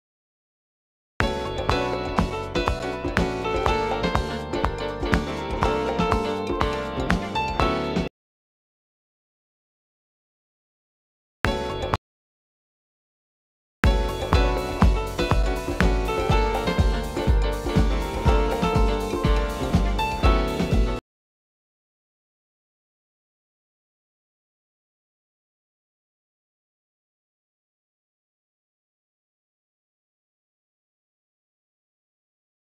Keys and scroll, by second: 1.0 u, 10.3 u, 13.1 typing, 16.0 c, 25.3 u, 30.1-32.6 typing.